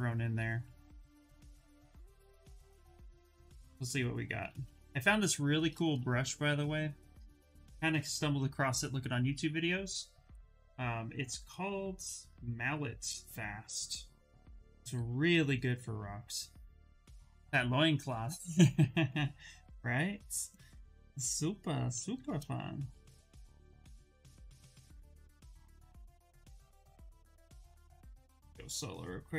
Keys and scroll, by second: 8.8 Return, 10.2 Return, 21.7 shift+f, 23.8 s.